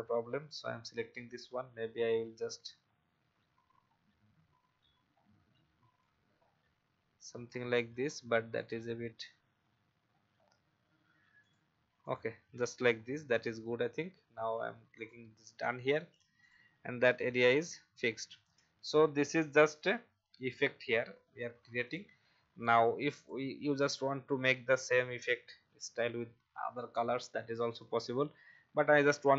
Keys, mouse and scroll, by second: 2.0 shift+scroll down 1, 2.8 shift+scroll up 1, 6.3 alt+scroll down 1, 9.0 scroll up 1, 11.4 click, 12.9 alt+scroll down 1, 14.9 click, 17.2 alt+click, 18.1-18.7 alt+scroll down 1, 18.8 click, 19.8 alt+scroll down 1, 20.3-24.3 drag, 28.4 scroll up 1.